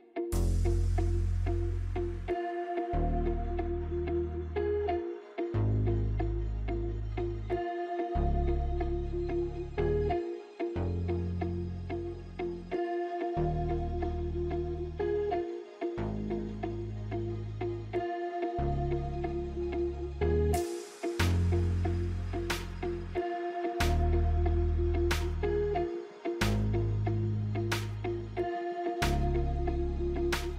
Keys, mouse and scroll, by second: 0.5 click, 2.7 click, 2.8-10.4 drag, 10.4 right click, 11.7 click, 13.9 click, 15.7 click, 17.4-20.1 drag, 20.1 alt+scroll up 1, 20.8 space, 21.1 click, 21.1 space, 21.8-24.7 drag, 28.0 click, 29.7 click, 30.1 alt+scroll down 1.